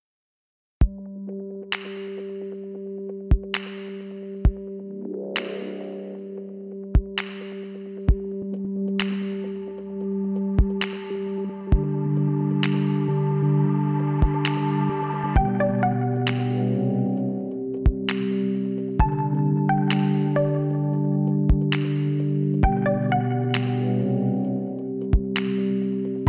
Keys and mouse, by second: 0.7-2.3 drag, 4.4 s, 6.8 s, 8.7-10.4 drag, 13.8 middle click, 14.6-17.7 drag, 15.8 z, 16.5 z, 18.1 e, 20.7 z, 21.0-22.7 drag, 21.4 z, 22.3 e, 24.9 click, 25.2 z, 26.0 b.